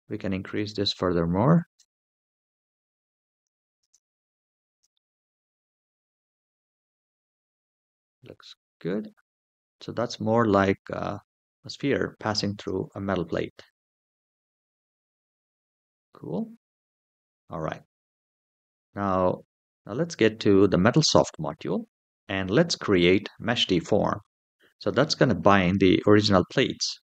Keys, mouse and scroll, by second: 0.2-1.6 drag, 3.1 click, 3.6 space, 4.4 space, 4.7-7.0 middle drag, 7.3-7.7 scroll down 3, 7.7-8.8 middle drag, 8.9 scroll down 2, 9.8 shift+middle drag, 10.3 scroll up 2, 11.4 click, 12.3 space, 13.0 space, 13.4-15.6 middle drag, 15.6 click, 15.7-17.1 middle drag, 19.3 click, 20.4 click.